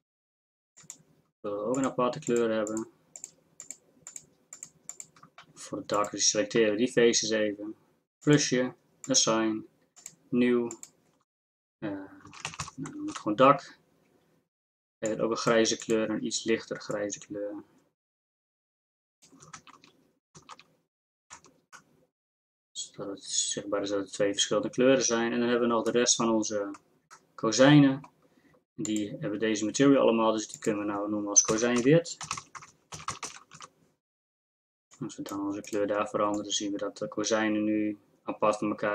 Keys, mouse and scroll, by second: 19.6 shift+z, 20.4 shift+z, 21.3 Tab.